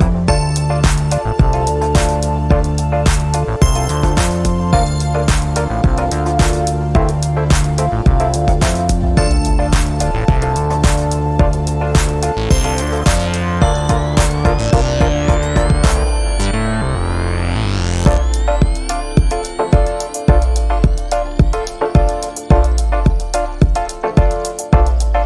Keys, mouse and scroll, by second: 0.1 middle click, 0.4-0.7 scroll up 2, 1.8-5.8 drag, 7.4-9.7 drag, 10.4 1, 11.0 2, 11.4 3, 15.6-18.2 drag, 19.2 click, 20.4 3, 20.8 5, 22.4-24.1 drag, 24.5-25.2 drag.